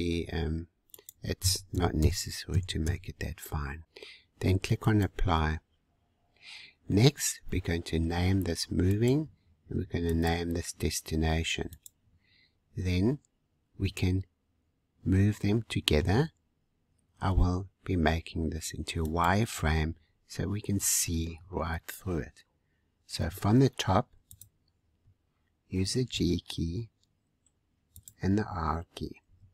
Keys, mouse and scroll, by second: 0.9-3.8 drag, 4.8-5.9 drag, 5.9-6.9 scroll down 5, 6.9 middle click, 7.6-7.9 scroll down 2, 8.8-10.3 drag, 11.7 click, 12.5-13.4 scroll down 4, 13.8-16.3 middle drag, 16.3 scroll up 1, 19.0-20.0 drag, 20.0-20.6 scroll up 5, 20.6-23.1 scroll down 6, 23.1 `, 26.0 g, 29.2 r.